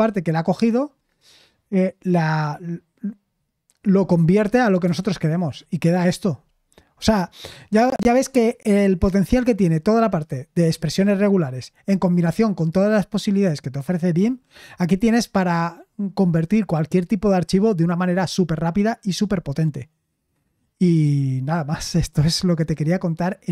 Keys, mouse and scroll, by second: 4.8 Return.